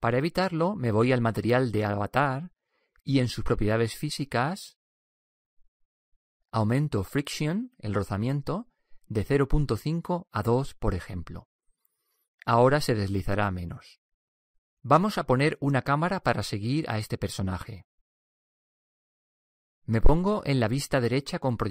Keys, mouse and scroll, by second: 2.1-5.3 drag, 10.0-11.8 drag.